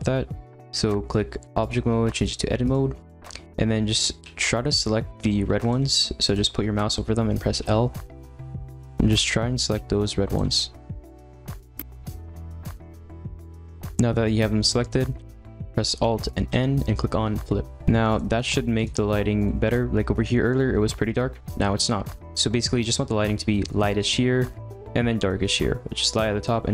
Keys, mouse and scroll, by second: 2.2-4.2 drag, 4.2 l, 5.2 g, 5.8 ctrl+z, 6.3 click, 7.6 l, 8.7 ctrl+z, 9.7 g, 10.4 ctrl+z, 11.0 middle click, 11.4-13.8 typing, 11.5 ctrl+z, 12.3 middle click, 15.1 ctrl+z, 18.7-19.4 drag, 21.8-22.5 middle drag, 22.5-23.0 scroll down 2, 23.0-25.9 scroll up 1.